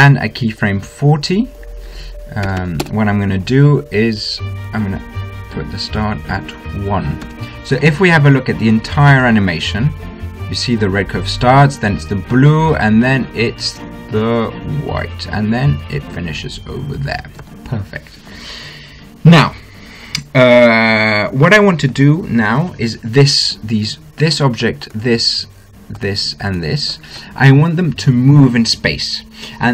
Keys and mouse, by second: 1.5-3.7 drag, 4.3-5.5 middle drag, 7.3 middle click, 8.1 i, 9.2-11.1 drag, 9.9 alt+a, 18.3 alt+a, 25.7-29.1 drag.